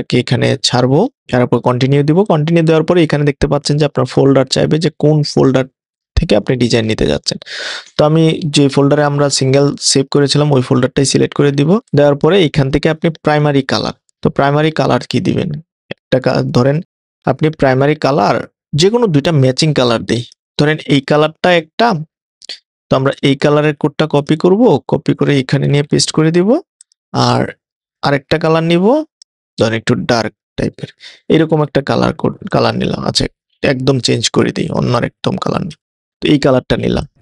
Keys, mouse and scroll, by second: 1.2 click, 15.0 click, 15.5 click, 17.5 0, 25.7 super+v, 26.8 click, 29.6 o, 32.5 o, 35.0 o, 37.0 o.